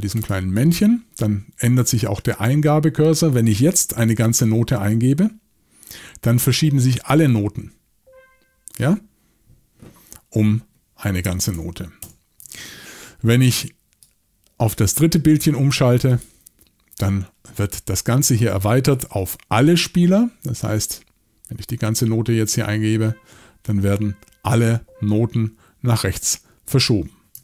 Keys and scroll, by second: 11.5 super+z, 12.0 super+z.